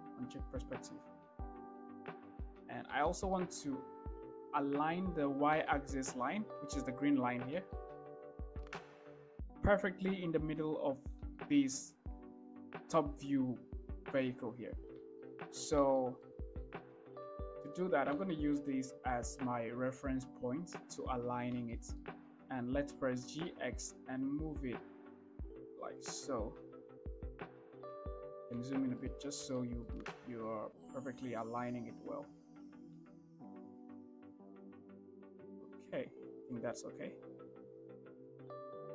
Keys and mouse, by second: 0.4 click, 2.3-2.7 shift+middle drag, 3.4 shift+drag, 6.0 shift+drag, 8.0 shift+drag, 8.8 shift+middle drag, 11.7 shift+middle click, 15.5 shift+middle click, 16.3-17.3 shift+middle drag, 17.8 shift+middle click, 18.6 shift+middle click, 23.4 g, 23.8 x, 29.0 shift+middle click, 29.9 shift+middle click, 30.8-31.1 shift+middle drag, 31.7 shift+middle click, 32.6 g, 32.9 x.